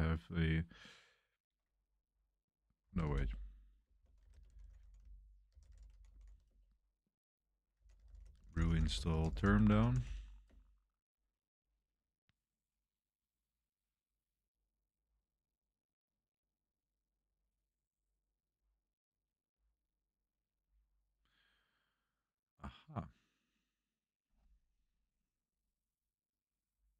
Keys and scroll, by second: 2.6-10.9 typing, 11.2 Return.